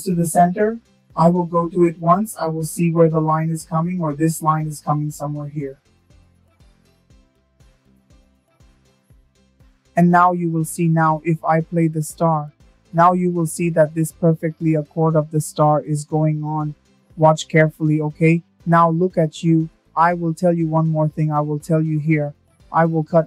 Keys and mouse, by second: 4.0 click, 13.2 click, 17.7-21.7 drag.